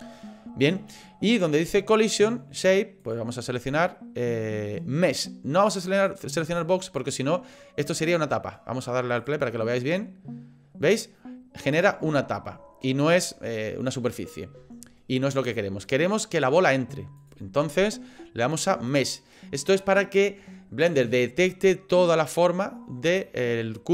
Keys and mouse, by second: 3.0-7.1 drag, 9.2 click, 9.7 middle click, 11.1 middle click, 17.2-23.0 drag.